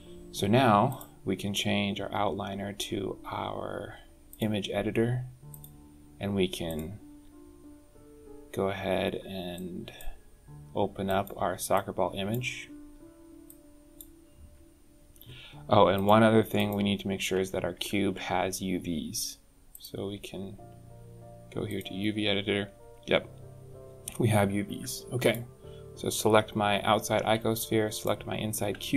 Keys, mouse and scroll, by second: 0.7 click, 5.3 click, 9.4 click, 10.9 click, 11.6 click, 13.3 click, 14.1-14.4 scroll down 4, 14.4 scroll up 1, 15.8 click, 16.4 click, 17.6 Tab, 19.6 click, 24.5 Tab, 25.1 click, 27.8 shift+click, 28.8-28.9 scroll down 10.